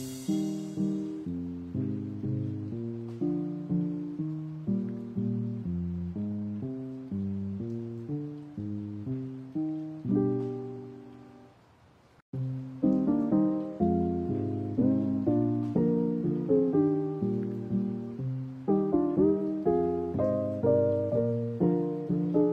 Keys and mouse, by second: 3.0 right click, 3.3 alt+right click, 4.1 ctrl+b, 8.4 middle click, 9.2 right click, 9.7 alt+right click, 10.2 middle click, 10.9 ctrl+b, 12.8 middle click, 13.5 right click, 13.9 alt+right click, 14.9 ctrl+b, 16.6 middle click, 17.2 right click, 17.7 alt+right click, 18.4 ctrl+b, 20.5 middle click, 21.5 ctrl+r, 21.9 ctrl+r.